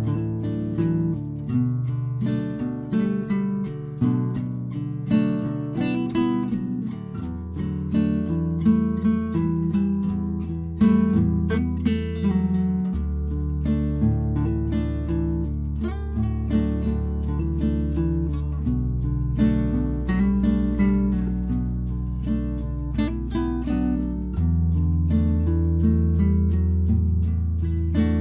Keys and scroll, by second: 1.4 ctrl+t, 17.4 Return, 20.2 ctrl+g.